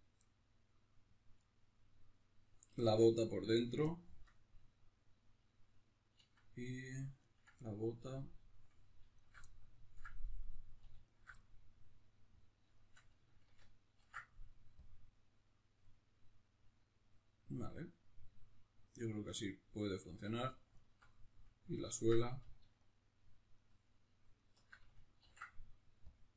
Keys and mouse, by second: 3.5 right click, 3.9-7.2 shift+middle drag, 7.2 ctrl+right click, 7.6-9.2 middle drag, 9.2 alt+shift+right click, 9.5-11.1 ctrl+middle drag, 11.1 alt+shift+right click, 11.4-20.7 middle drag, 13.9 ctrl+e, 20.7-25.2 alt+right drag, 25.2 ctrl+e.